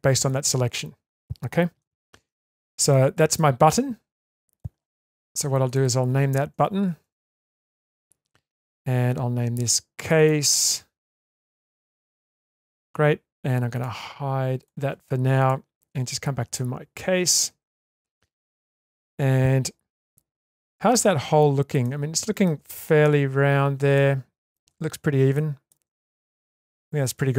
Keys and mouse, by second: 1.8 Tab, 2.9-4.6 middle drag, 5.6 click, 5.8-8.6 drag, 7.6 t, 10.0 click, 10.1-12.8 drag, 13.7 click, 14.6 click, 15.4 click, 15.9 Tab, 16.5-17.7 middle drag, 18.5 middle click, 20.1-20.9 middle drag, 21.2 Tab, 21.8-22.4 middle drag, 24.0-24.5 shift+middle drag, 25.3 shift+middle click, 25.9 Tab, 26.2-27.1 middle drag.